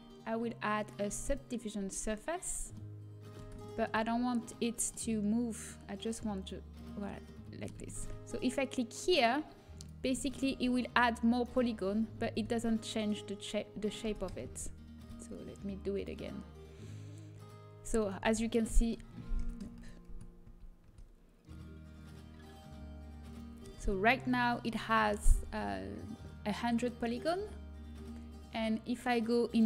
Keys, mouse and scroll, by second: 2.4-6.5 middle drag, 6.5 right click, 7.2-8.3 drag, 8.3-9.7 middle drag, 9.7-11.4 drag, 10.9 Tab, 11.4 middle click, 12.2 ctrl+z, 14.0 Tab, 14.4 ctrl+z, 15.9-17.8 drag, 18.6 Tab, 20.0 Tab, 20.0 ctrl+z, 20.4 ctrl+z, 24.3 Tab.